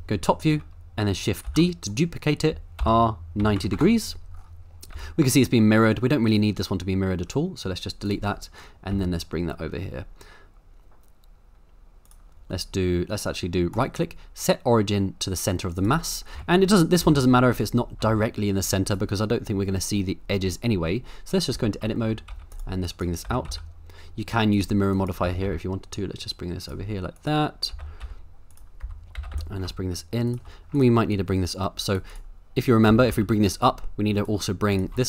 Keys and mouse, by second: 1.5 shift+d, 2.8 r, 3.4 KP_9, 3.6 KP_0, 3.7 KP_Enter, 4.9 g, 6.3 right drag, 8.1 click, 8.9 g, 12.0 click, 13.8-15.9 right drag, 16.3 KP_7, 17.0 g, 17.5 right click, 18.0 g, 18.8-19.4 right drag, 21.5 Tab, 22.0 shift+middle click, 22.3 z, 22.8 click, 23.2 g, 23.5 x, 24.5 click, 25.2 g, 25.4 x, 26.6 click, 27.1 click, 27.7 g, 28.0 x, 28.5 click, 28.8 Tab, 29.1 g, 29.3 y, 30.3 shift+click, 30.8 click, 31.1-31.9 drag, 31.9 right click, 31.9 middle click, 32.9 g, 33.1 z.